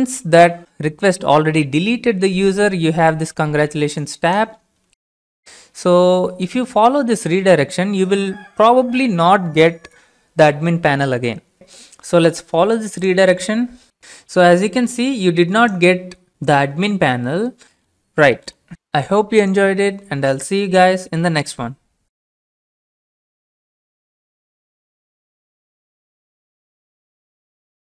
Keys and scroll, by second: 5.0 alt+Tab, 6.0 alt+Tab, 6.3 alt+Tab.